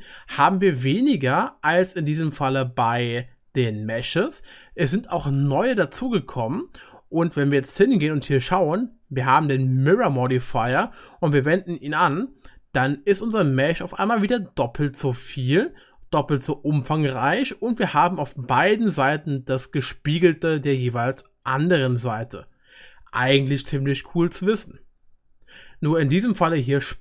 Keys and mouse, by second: 0.8-8.8 drag, 0.8-8.8 middle drag, 0.8-8.8 right drag, 17.4-27.0 drag, 17.4-27.0 middle drag, 17.4-27.0 right drag.